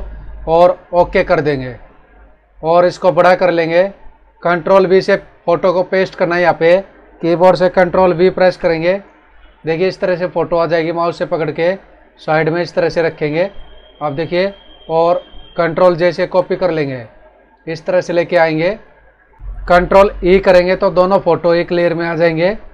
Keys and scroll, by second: 8.4 ctrl+v, 12.4 ctrl+=, 12.9 ctrl+-, 16.0 ctrl+j, 19.0 Up, 19.4 Right, 20.2 ctrl+e.